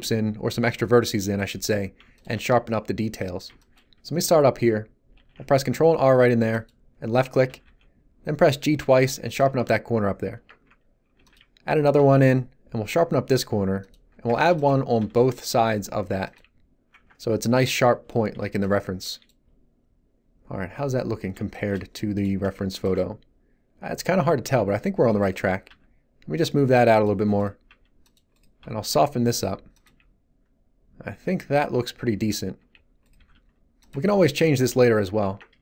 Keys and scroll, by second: 5.1 ctrl+r, 7.4 g, 9.4 Tab, 11.1 ctrl+r, 11.9 g, 14.5 ctrl+r, 14.9 g, 16.3 Tab, 24.4 Tab, 25.6 g, 29.8 Tab, 33.1 g, 33.9 Tab.